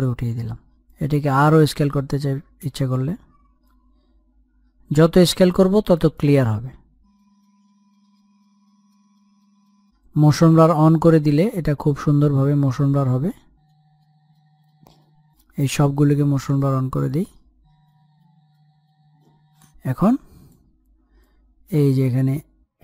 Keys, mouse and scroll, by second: 0.4-22.8 drag.